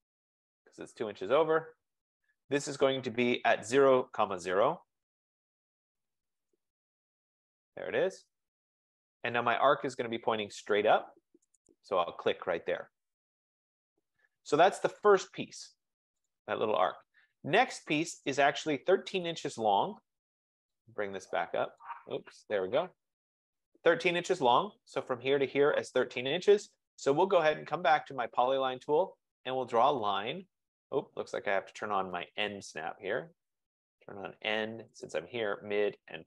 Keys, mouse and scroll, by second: 5.4-6.7 typing, 12.2-13.8 drag, 15.3 click, 16.4 click, 19.8 click, 20.8 click, 22.1 click, 26.9 click, 28.7 click, 32.8 F15, 33.9 click, 35.1 click.